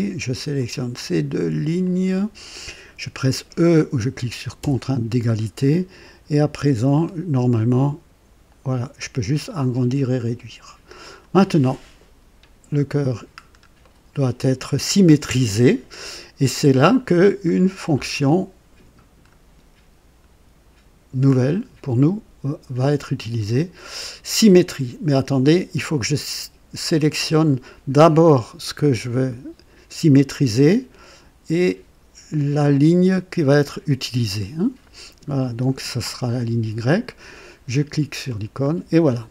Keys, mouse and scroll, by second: 0.5 click, 1.3 typing, 1.8 click, 4.5 typing, 5.4-5.7 scroll down 1, 6.9-11.3 drag, 12.5-13.2 typing, 12.7-13.1 scroll up 1, 13.4 scroll down 1, 13.8-14.3 right drag, 18.2-19.4 drag, 32.7 click, 38.2 click.